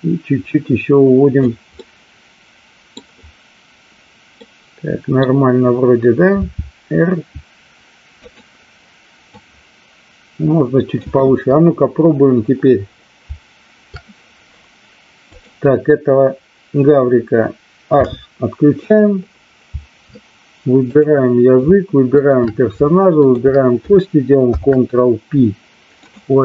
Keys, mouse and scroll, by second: 1.7-3.0 middle drag, 4.3 middle click, 6.2 r, 8.2 click, 9.3-11.0 drag, 17.9 h, 20.9 click, 23.2 shift+click, 25.1 ctrl+p.